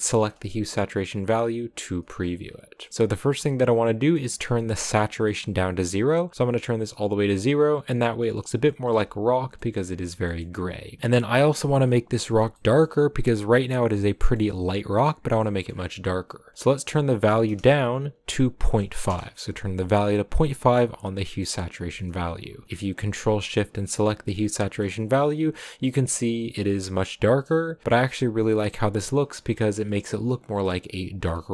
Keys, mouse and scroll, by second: 0.0-2.0 ctrl+shift+drag, 2.0-2.5 scroll down 4, 2.5-2.8 scroll up 4, 2.8 middle click, 3.5-4.0 scroll down 1, 4.0-6.5 middle drag, 6.5-7.8 drag, 7.8-8.5 scroll up 2, 8.5 scroll up 1, 8.6-10.6 shift+middle drag, 10.6-11.5 scroll up 6, 12.4 middle click, 12.8-13.5 scroll up 4, 14.0-16.1 shift+middle drag, 16.1-16.5 scroll up 3, 16.5-20.8 drag, 21.1-22.6 middle drag, 22.6 ctrl+shift+click, 23.3 ctrl+shift+click, 24.4 middle click, 24.8-25.3 scroll up 1, 25.3-26.5 scroll up 1, 26.5-27.8 scroll up 1, 27.8-30.4 middle drag, 30.4 scroll down 1, 30.6-31.5 middle drag.